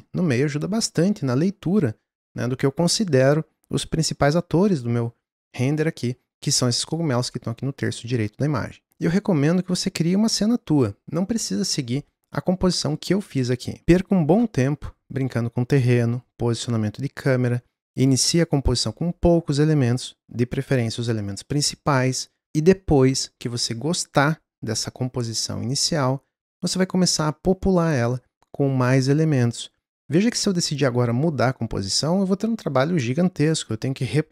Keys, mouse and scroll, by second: 8.9 n.